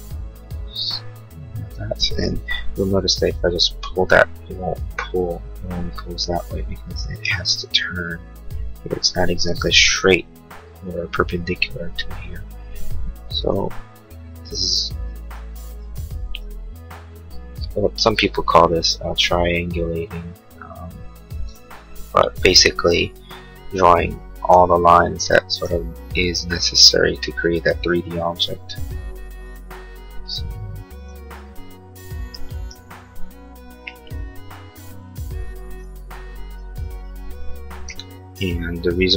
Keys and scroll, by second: 2.5 p, 7.1 Escape, 13.7 l, 23.3 Escape.